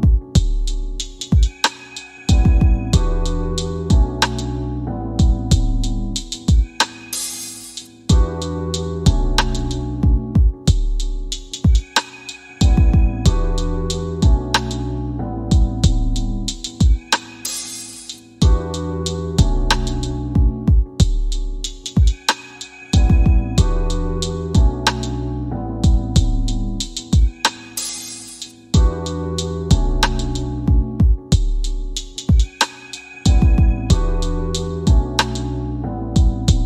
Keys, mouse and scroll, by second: 1.9 alt+r, 4.3-6.0 right drag, 7.5-10.2 drag, 10.4 space, 14.2 space, 18.9-20.7 scroll down 15, 21.8 click, 23.1 space, 30.2 space, 31.0 scroll up 2, 32.1-36.6 drag.